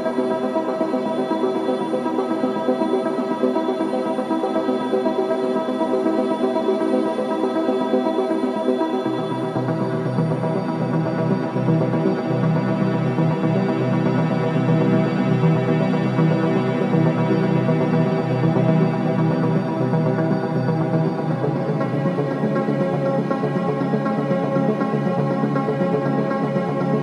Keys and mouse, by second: 0.0 click, 1.6 Tab, 2.9 Left, 3.4 Left, 3.4 Left, 6.8-7.5 typing, 9.5-10.2 typing, 12.0 typing, 13.4 Delete, 13.6-14.5 typing, 15.6-16.3 typing, 18.7-19.1 typing, 21.3 click, 22.7 typing, 24.3 click.